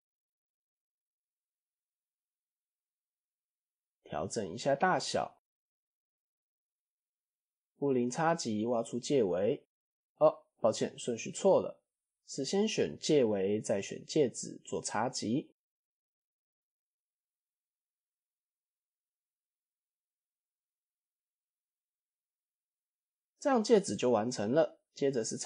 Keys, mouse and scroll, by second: 0.5 middle click, 1.3-1.9 middle drag, 2.5 KP_1, 3.5 click, 3.8 click, 4.2 s, 6.3-7.3 middle drag, 7.4-7.8 middle drag, 8.0 click, 8.5 shift+click, 9.6 ctrl+KP_Subtract, 10.7 ctrl+z, 11.2 click, 12.1 click, 12.7 shift+click, 13.7 ctrl+KP_Subtract, 14.1-15.2 middle drag, 15.4 click, 16.5 click, 17.2-18.1 right drag, 18.5 click, 19.9 click, 21.5-22.4 middle drag, 22.4-22.9 scroll down 5, 22.9-23.2 middle drag, 23.2 scroll up 1, 23.9-24.6 scroll up 2.